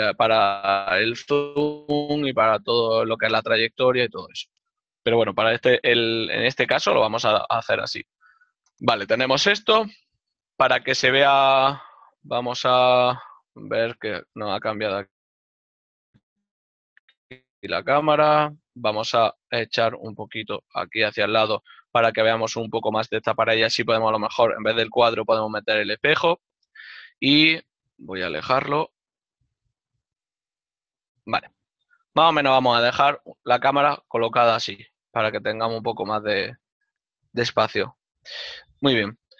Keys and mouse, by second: 5.1 ctrl+middle click, 8.1 ctrl+middle click, 14.4 KP_3, 14.6 KP_Enter, 28.8-29.7 typing, 29.0 click, 30.1 click.